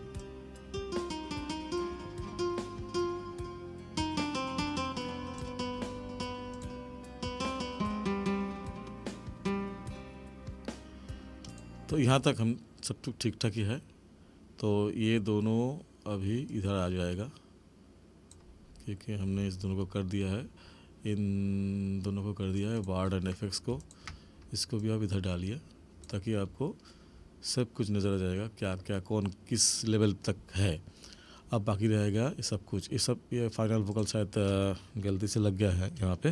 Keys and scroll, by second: 12.1 space.